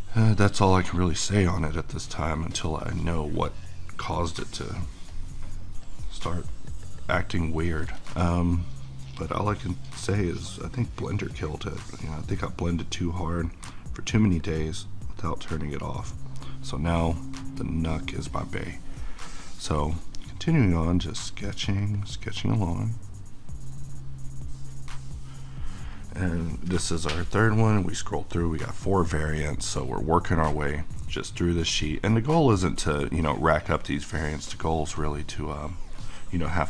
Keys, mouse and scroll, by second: 6.9-8.3 middle drag, 8.3-25.6 drag, 25.6-30.8 middle drag, 31.7 click, 31.9 q, 32.6 click, 33.1 middle click, 35.0 click.